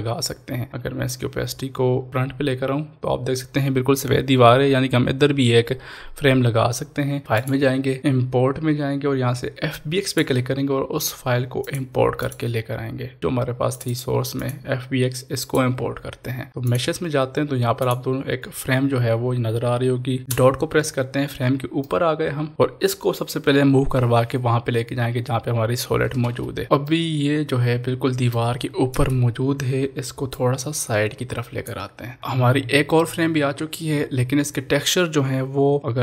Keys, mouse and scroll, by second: 1.0 click, 1.1 click, 7.2 click, 10.0 click, 10.0 click, 20.9 click, 21.0-21.4 scroll down 1, 21.9-23.9 middle drag, 23.9 ctrl+s, 23.9 click, 24.0 middle click, 24.1 click, 24.1 middle click, 24.2 click, 24.4 ctrl+z, 24.5 shift+click, 24.8 middle click, 24.9 shift+click, 25.3 shift+middle click, 25.4 click, 25.4 middle click, 25.5 shift+click, 25.7 middle click, 25.7 scroll down 1, 25.8 shift+click, 26.0 middle click, 26.1 shift+click, 26.2 ctrl+z, 26.3 shift+click, 26.4 scroll up 1, 26.4 click, 26.6 scroll down 1, 26.8-30.3 middle drag, 30.3-32.2 drag, 32.2 ctrl+s.